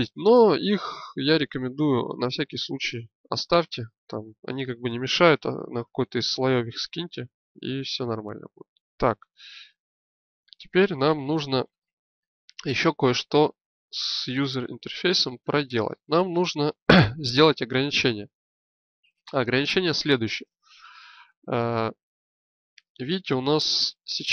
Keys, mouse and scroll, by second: 8.6-10.3 drag, 14.1 KP_1.